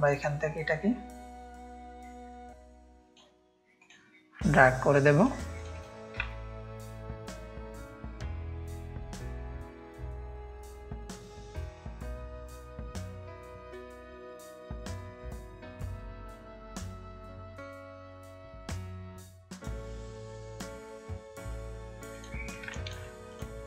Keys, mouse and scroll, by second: 0.3-3.2 drag, 3.8-6.0 drag, 6.3 ctrl+space, 6.3-7.8 ctrl+drag, 9.3-10.1 shift+drag, 10.7-11.3 shift+drag, 11.6 ctrl+z, 11.8 ctrl+drag, 12.3-13.1 shift+drag, 13.9-16.3 drag, 16.6 ctrl+space, 16.6 ctrl+click, 17.6 ctrl+space, 17.6 ctrl+click, 18.8 click, 18.8 space, 19.5 drag, 20.6-21.6 drag, 22.1-23.3 drag, 22.7 space.